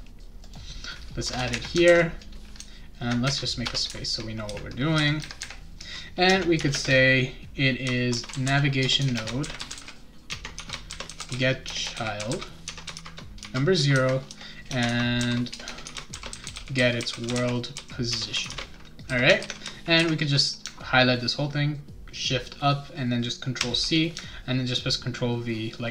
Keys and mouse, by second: 0.4 click, 1.2 Return, 1.3 Return, 1.9 ctrl+v, 3.6 Return, 6.3 space, 6.5 =, 6.7 space, 7.8-19.1 typing, 10.3 Tab, 19.4 ctrl+s, 23.6 ctrl+c.